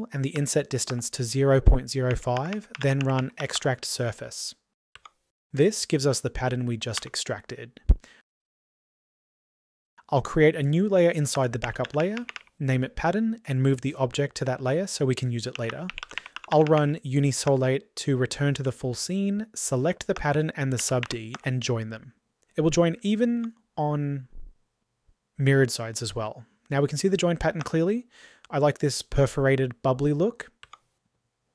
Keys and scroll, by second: 6.8 ctrl+z, 27.4 typing.